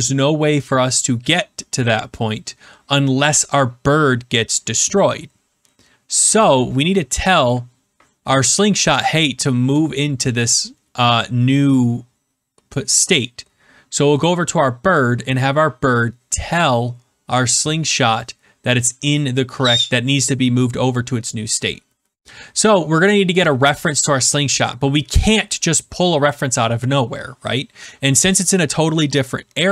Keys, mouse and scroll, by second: 14.9 click, 22.1 BackSpace.